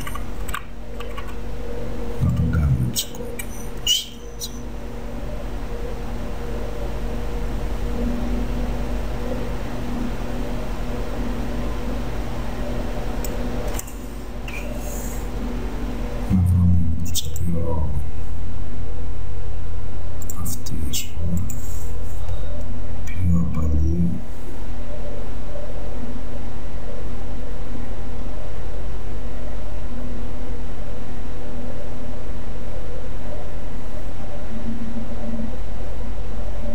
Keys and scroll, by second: 0.0 ].